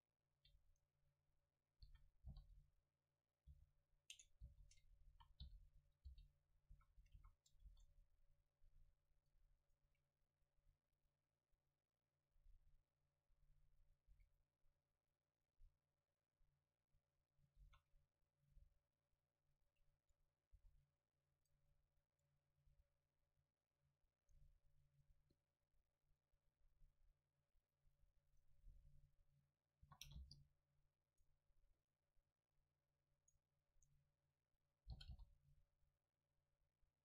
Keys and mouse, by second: 1.9 s, 3.6 h, 4.5 ctrl+z, 5.1-7.2 typing, 6.7-8.6 drag, 7.7 ctrl+s, 9.2-11.8 right drag, 14.2 a, 14.4 middle click, 15.1 middle click, 15.3 middle click, 17.1 middle click, 17.7 shift+a, 20.6 s, 21.5-23.8 drag, 21.6 Tab, 22.7 w, 23.8 middle click, 27.4-30.6 drag, 31.1-32.9 right drag, 31.8-32.9 drag, 32.9 middle click, 33.2 click, 33.2-34.9 right drag, 34.9-36.2 middle drag, 35.0 g.